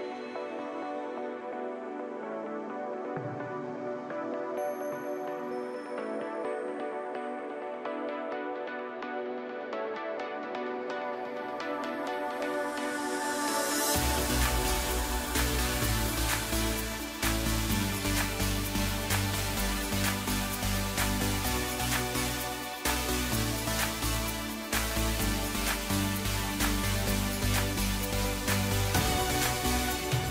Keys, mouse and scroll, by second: 0.8 Tab, 1.6 click, 2.9 click, 3.3-4.0 middle drag, 4.0-4.8 right drag, 4.8-7.3 middle drag, 7.3-7.7 drag, 7.7-9.6 middle drag, 9.6-10.9 drag, 10.9 KP_Divide, 11.8 KP_7, 13.2 KP_1, 14.4 g, 17.1-17.7 scroll up 3, 17.7 click, 18.5 g, 20.7 click, 21.9 s, 23.3 g, 25.9 KP_7, 26.7 scroll down 1, 26.9-29.4 middle drag, 29.4 KP_1, 30.1-30.3 scroll up 2.